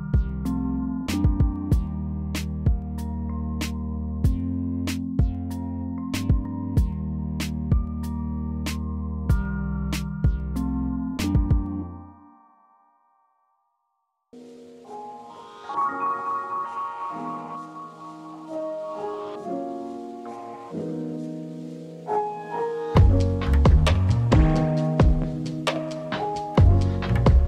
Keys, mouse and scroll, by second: 0.6 middle click, 0.7 e, 0.8 middle click, 1.1 e, 1.4 ctrl+z, 2.2 ctrl+z, 2.3 middle click, 2.8 e, 2.9 b, 3.8 ctrl+z, 4.3-8.5 typing, 4.8 ctrl+z, 6.9 ctrl+z, 9.2 ctrl+z, 9.9-15.6 typing, 12.1 ctrl+z, 14.4 ctrl+z, 15.1 middle click, 15.4 middle click, 17.0-20.4 typing, 17.7 ctrl+z, 19.7 middle click, 20.7 middle click, 21.1 ctrl+z, 21.7 ctrl+z, 22.0 x, 22.4 ctrl+z, 23.1 ctrl+z, 23.6-27.4 typing, 24.1 scroll down 1, 25.3 middle click, 25.6 middle click, 25.8 scroll down 1, 26.7 scroll up 1, 26.8 middle click.